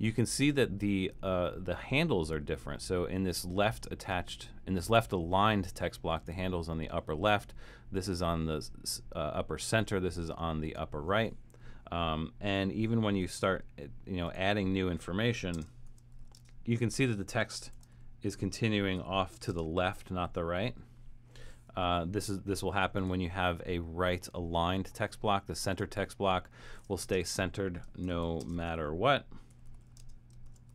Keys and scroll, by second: 15.6-19.5 typing, 21.8 BackSpace, 27.1-30.7 typing.